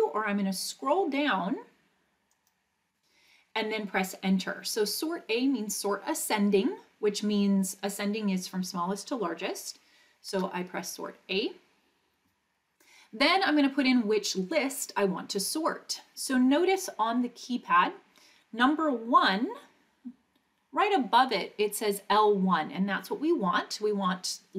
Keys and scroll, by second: 2.3 Down, 10.3 Return.